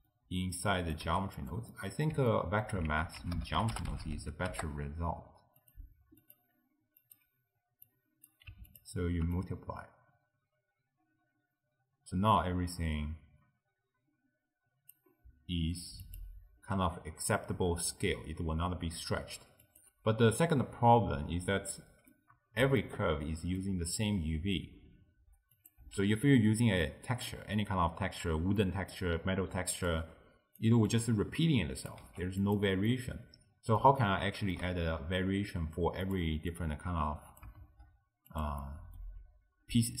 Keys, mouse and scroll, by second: 0.6 click, 1.1 g, 1.8-2.9 middle drag, 2.9 ctrl+a, 6.2-8.9 drag, 9.4-12.6 drag, 16.1 click, 19.7 click, 22.2-25.6 middle drag, 25.6 click, 26.0 x, 26.2 middle click, 26.7-27.6 scroll down 1, 27.6-28.7 scroll down 3, 28.7 middle click, 29.2-29.9 scroll down 1, 29.9 click, 30.9 click, 32.1 g, 32.9-36.1 middle drag, 36.1 click, 36.6 click, 37.8 shift+d, 38.7-40.0 middle drag.